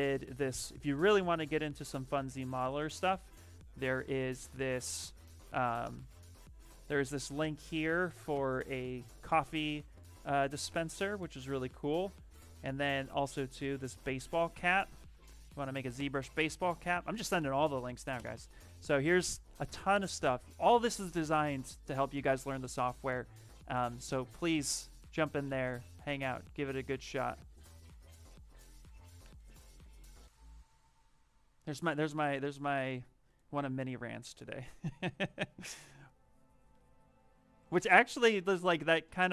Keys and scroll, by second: 5.4 ctrl+v, 5.8 Return, 14.7 ctrl+c, 18.0 shift+Return.